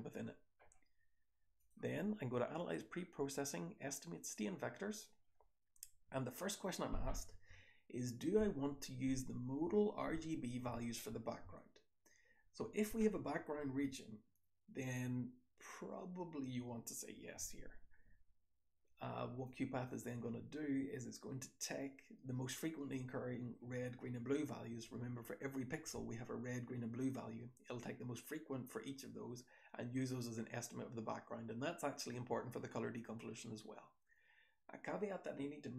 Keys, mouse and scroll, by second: 1.5 click, 1.5-2.2 scroll up 1, 2.2-3.6 scroll up 1, 3.6-4.4 scroll up 1.